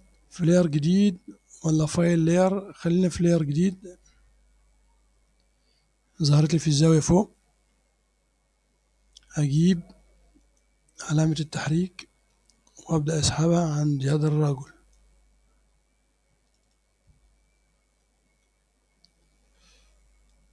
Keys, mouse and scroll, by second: 3.5 click, 4.7-5.1 scroll down 1, 5.7 scroll up 1, 10.5 click, 12.4-15.2 drag, 16.5 click, 17.4-17.9 scroll up 1, 18.0 middle click, 18.9 scroll up 1, 19.3 middle click, 20.4-20.5 drag.